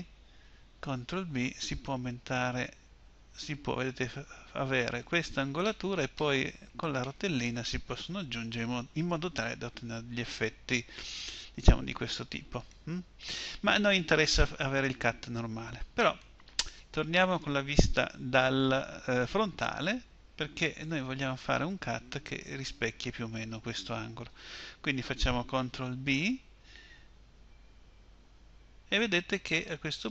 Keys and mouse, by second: 0.8 ctrl+b, 12.6-14.5 drag, 19.4 KP_1, 26.0 ctrl+b.